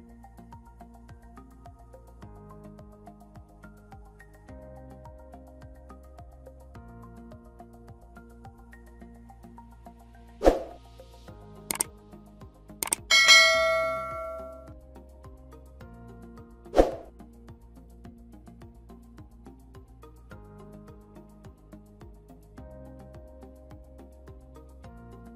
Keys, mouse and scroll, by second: 3.1 click, 3.5 scroll down 1, 6.5 click.